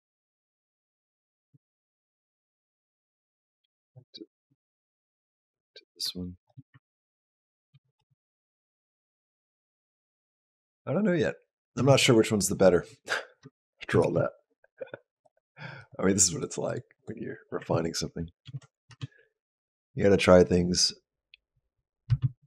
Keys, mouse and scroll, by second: 0.5 click, 3.4 ctrl+b, 4.5 ctrl+z, 5.8 click, 7.5 ctrl+b, 7.8 space, 11.6 space, 13.8 shift+Down, 14.9 click, 15.6 click, 16.1 click, 16.5 click, 16.8 click, 18.3 ctrl+b, 18.7 space, 21.9 space.